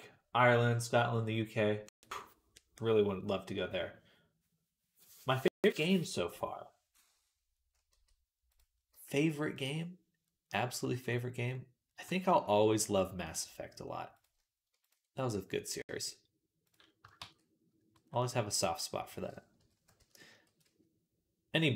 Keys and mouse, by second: 7.1-8.6 right drag, 7.7 g, 8.8 g, 9.6-21.7 right drag, 13.1-14.1 drag, 13.1-14.1 middle drag, 14.6 ctrl+click, 15.8 click, 17.0 shift+s, 17.8 b, 19.4 ., 20.3 r.